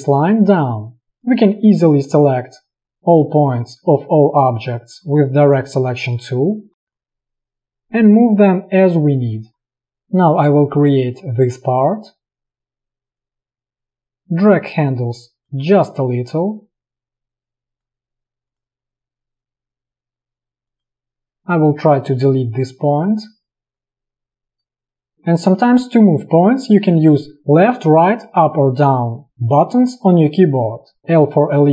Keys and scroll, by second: 9.8 space, 21.9 p, 22.8 a, 30.6 Down, 31.1 d, 31.1 l.